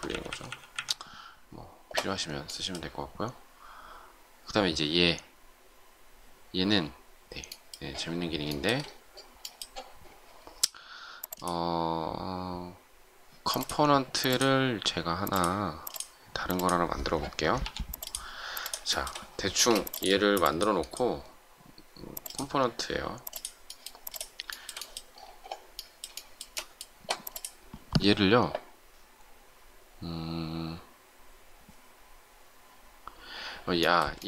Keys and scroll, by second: 19.5 shift+space.